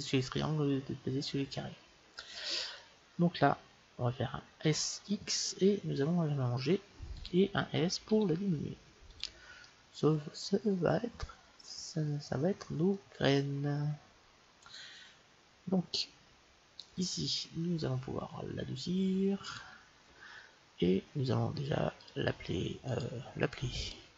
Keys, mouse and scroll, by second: 4.6 s, 8.1 s, 9.6-11.6 middle drag, 13.6-16.9 middle drag, 19.0 middle click, 19.4-21.2 drag, 22.0-24.1 drag.